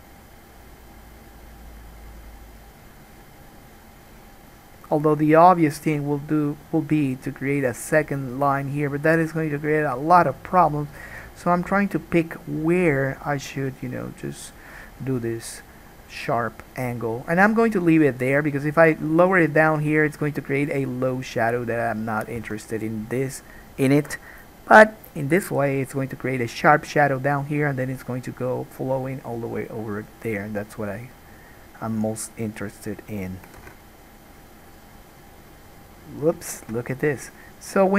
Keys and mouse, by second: 10.9-25.3 middle drag, 22.7 alt+a, 25.3-32.8 drag, 32.8 middle click, 33.9 ctrl+z.